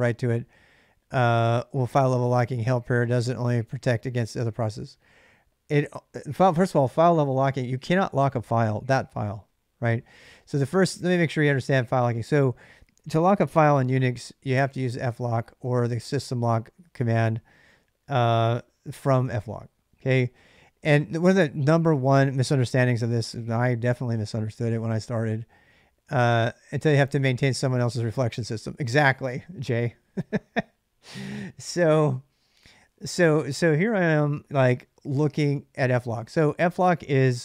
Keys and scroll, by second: 13.0 ctrl+a, 13.3-15.9 typing, 15.9 Return.